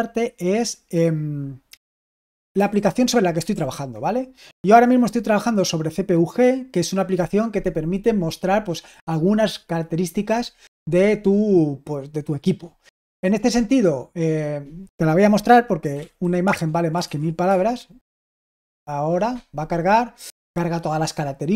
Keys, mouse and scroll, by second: 2.6 super+h, 3.4 super+l, 15.6-18.2 typing.